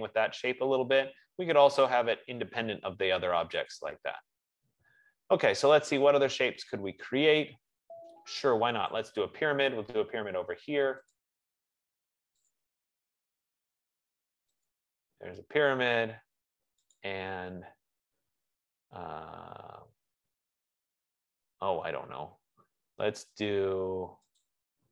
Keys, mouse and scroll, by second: 2.0 typing, 7.0 click, 9.3 click, 11.4 click, 12.7 click, 15.0 click, 17.3 click, 24.6 click.